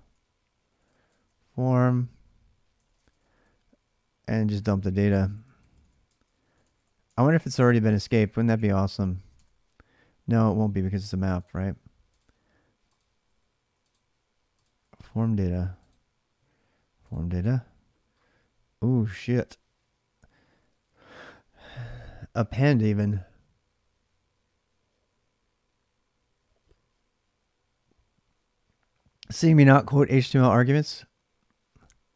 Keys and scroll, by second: 0.0-8.7 typing, 8.4 ctrl+[, 8.7 Return, 9.1 alt+Tab, 13.0 d, 14.2-15.1 typing, 29.5 alt+Tab.